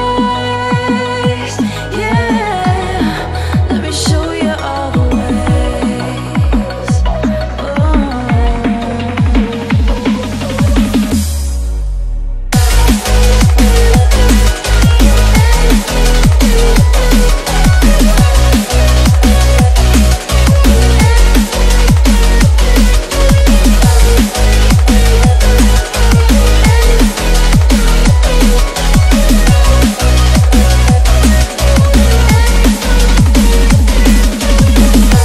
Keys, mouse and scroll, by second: 4.5-5.4 drag, 10.7 click, 11.1 BackSpace, 12.1 click, 12.9 BackSpace, 13.8 ctrl+=, 14.1 space, 14.3 click, 14.5 space, 15.1 click, 15.3 BackSpace, 16.5 click, 16.7 BackSpace, 17.5 click, 17.9 BackSpace, 18.2 click, 18.5 space, 18.8 ctrl+=, 19.2 space, 19.3 click, 19.5 space, 19.9-20.6 click, 20.8 BackSpace, 21.2 space, 21.3 click, 21.5 space, 22.3 click, 22.5 BackSpace, 23.0 click, 23.2 BackSpace, 23.8 click, 24.4 shift+click, 24.6 BackSpace, 24.9 space, 25.1 click, 25.2 space, 25.6 click, 25.7 space, 27.3 click, 27.8 shift+click, 31.8 BackSpace, 32.5 click, 33.0 BackSpace, 33.2 space, 33.4 click, 33.6 space, 33.8 click.